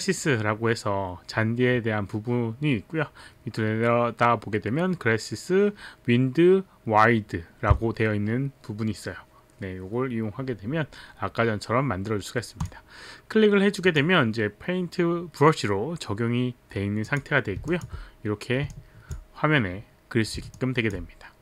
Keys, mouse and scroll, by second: 12.6 click, 13.8 click, 17.1 click, 17.6 alt+click, 18.7 alt+click, 20.6 alt+click.